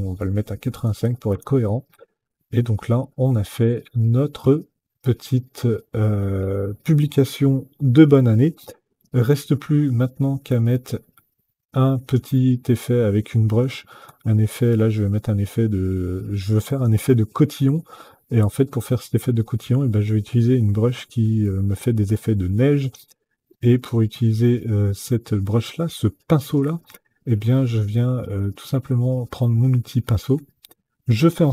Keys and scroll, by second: 0.5 KP_8, 0.8 KP_5, 1.0 Return.